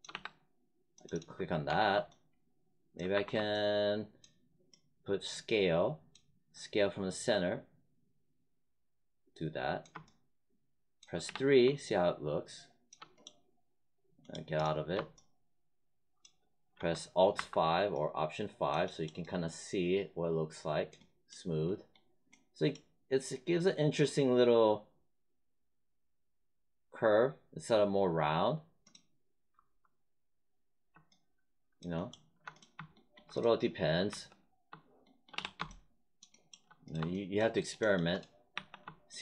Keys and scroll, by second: 0.1 3, 1.6 1, 3.1 r, 11.2 3, 17.3 alt+5, 29.5 F1, 34.0 1, 35.3 3, 38.5 1.